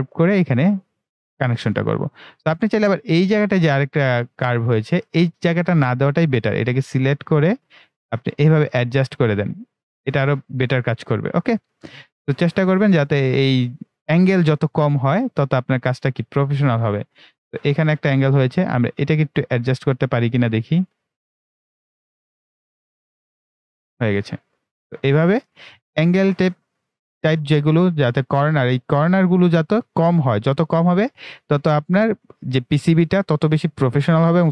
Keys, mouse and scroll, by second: 1.6 right click, 2.2-2.8 scroll up 1, 3.6 scroll down 1, 3.7-4.0 ctrl+scroll up 1, 5.9-9.1 drag, 9.5-10.2 scroll down 2, 13.7-14.5 ctrl+scroll up 1, 16.2 ctrl+middle click, 16.9-17.3 ctrl+scroll down 1, 19.1-23.9 drag, 24.3-24.7 scroll down 2, 26.9-29.7 right drag, 29.7-30.0 scroll down 2, 31.8-34.5 right drag.